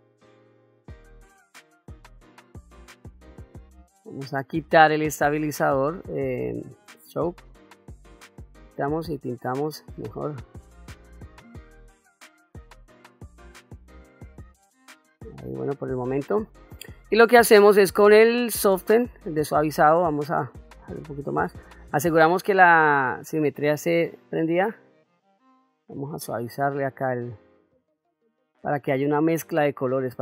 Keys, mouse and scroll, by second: 0.3 click, 1.2 middle click, 1.6-3.1 drag, 4.6-7.6 drag, 7.9 middle click, 8.7-12.3 drag, 12.4 middle click, 12.7 click, 13.3 middle click, 13.7 middle click, 14.1 middle click, 14.4-15.6 drag, 15.8 middle click, 18.4 click, 20.2 f, 24.3-27.3 drag, 27.7-30.2 drag.